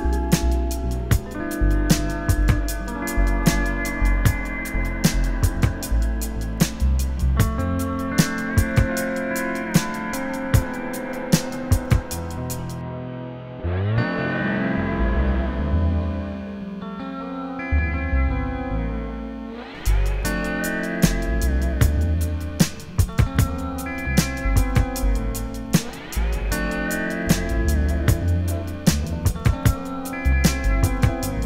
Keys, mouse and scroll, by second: 0.2 shift+click, 1.0 alt+a, 1.3 ctrl+r, 2.5 click, 5.1 alt+a, 8.0 click, 8.3 ctrl+r, 9.6 1, 10.2 click, 10.3 shift+click, 11.0 alt+a, 12.3 click, 12.8 ctrl+shift+b, 14.0 right click, 14.1 scroll up 1, 14.3-14.6 scroll down 1, 14.6 2, 14.8 click, 15.0 ctrl+x, 15.2 1, 15.4 click, 15.8 ctrl+shift+b, 17.3 ctrl+r, 17.8 alt+a, 18.0 ctrl+r, 18.4 right click, 18.7 click, 19.0 shift+click, 20.4 click, 20.5 shift+click, 20.9 alt+m, 21.1 alt+a, 21.7 ctrl+r, 22.7 click, 23.0 shift+click, 23.4 j, 23.9 click, 24.2 shift+click, 26.4 ctrl+r, 26.8 alt+a, 26.9-27.3 scroll down 1, 27.3 KP_1, 27.6-28.2 scroll up 1, 29.0 ctrl+r.